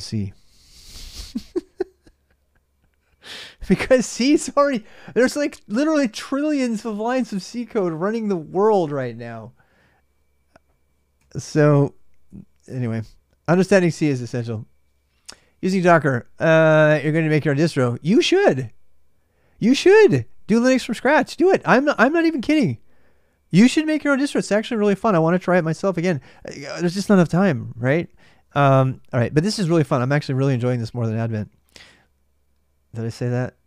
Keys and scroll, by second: 0.0-33.6 typing.